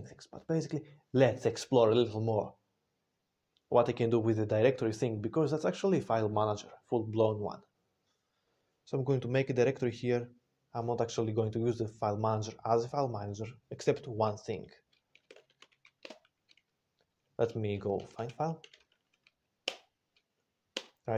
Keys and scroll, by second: 15.1 typing, 17.9-19.2 typing, 19.5 Return, 20.6 Return.